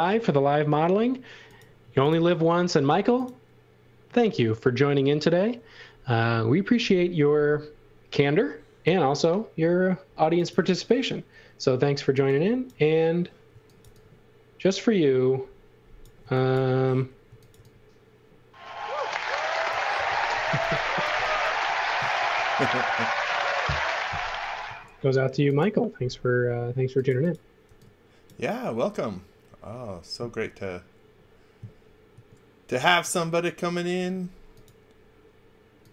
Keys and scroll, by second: 1.8 space, 2.7 f, 12.1 e, 13.5 x, 13.8 v, 16.2 x, 17.5 v, 20.0-22.1 typing, 24.6 a, 27.6 e, 32.1 a.